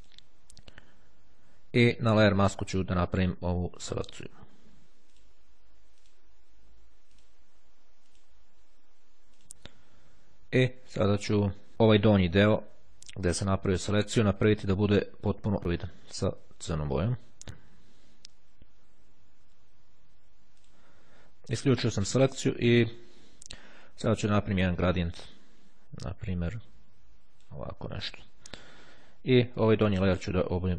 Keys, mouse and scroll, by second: 0.1 click, 2.2 click, 5.1 click, 6.1 click, 7.3 click, 8.3 click, 9.2 click, 16.2-17.8 drag, 20.6 click, 25.2-27.9 drag, 29.6 click, 30.5 click.